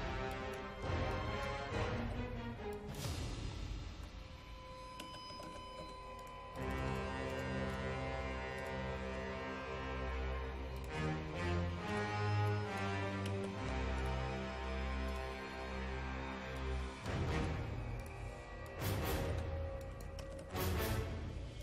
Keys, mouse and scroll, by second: 0.7-3.1 typing, 1.2 click, 2.8 click, 5.1 KP_Decimal, 5.4 KP_1, 5.9 KP_5, 6.3 click, 13.1 KP_0, 13.4 KP_Decimal, 13.6 KP_5, 14.1-19.0 drag, 19.0-20.5 typing, 19.9 click, 20.9 click.